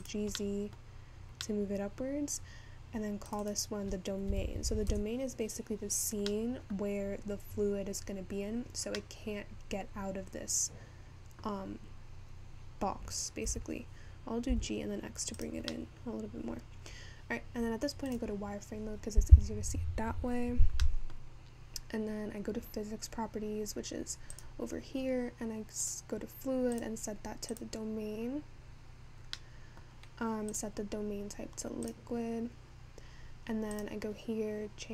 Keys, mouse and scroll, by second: 14.3 g, 16.5-18.1 middle drag, 18.1-21.2 scroll up 2.